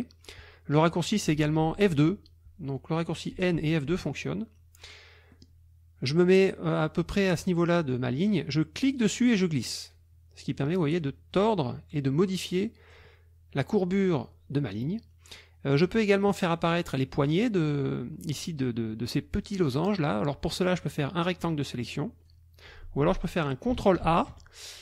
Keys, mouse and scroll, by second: 2.0 F2, 3.3 n, 3.7 F2, 5.3 click, 8.8-13.1 drag, 21.4-22.4 drag, 23.0 click, 24.1 ctrl+a.